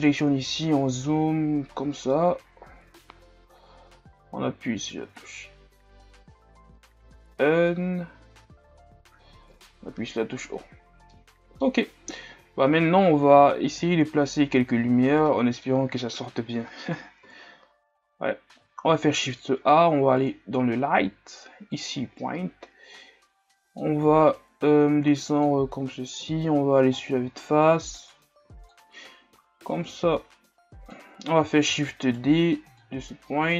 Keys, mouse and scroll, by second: 0.0 drag, 0.3 n, 0.6-3.2 scroll up 5, 3.2 n, 5.7 scroll down 1, 9.6 KP_0, 10.5 scroll down 2, 11.1-12.7 middle drag, 12.7 n, 14.2 scroll up 6, 14.9 ctrl+scroll up 2, 15.3-16.5 middle drag, 16.5 scroll up 1, 17.4 KP_3, 18.0 scroll down 4, 23.0-26.3 drag, 26.3 KP_1, 27.1 scroll up 4, 27.4 shift+scroll down 2, 28.5-31.8 drag, 31.8 shift+d, 33.0-33.5 drag.